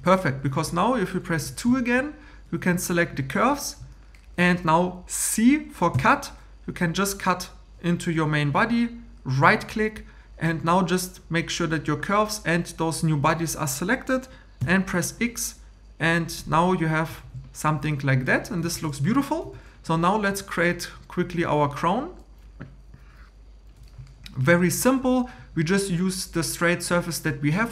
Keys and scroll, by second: 1.4 2, 5.9 c, 14.6 x, 17.2 shift+e.